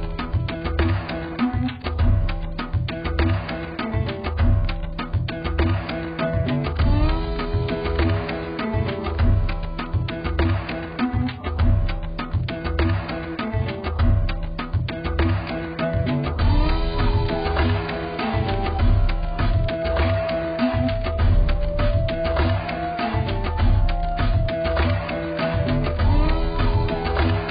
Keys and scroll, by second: 0.7 z, 7.0 z.